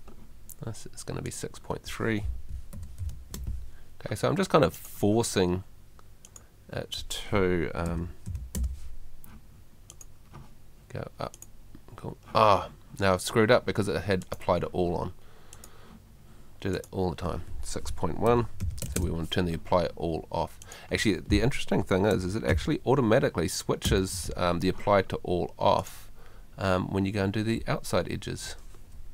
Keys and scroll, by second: 2.7 6, 7.9 6, 18.3 6, 22.1 6, 23.9 2.